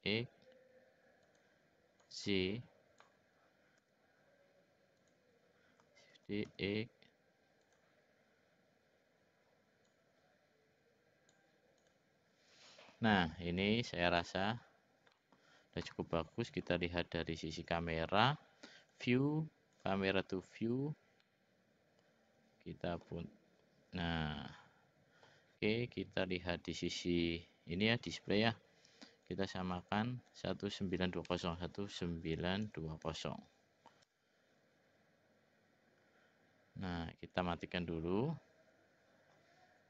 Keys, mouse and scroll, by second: 2.0-3.0 drag, 3.7 s, 6.2 shift+d, 9.9-11.4 drag, 11.8 click, 13.9 click, 14.2 click, 15.1 middle click, 16.5 click, 18.8 click, 19.7 click, 21.2-23.0 middle drag, 24.0-25.3 middle drag, 26.8 click, 29.3 click, 30.3-34.6 drag, 37.3 click.